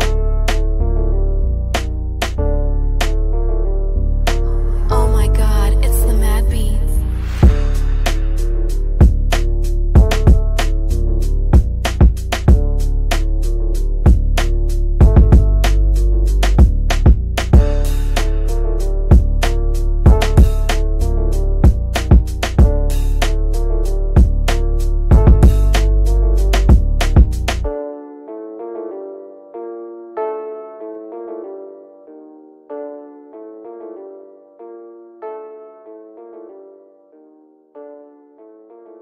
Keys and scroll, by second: 2.3 Delete, 29.9 Delete.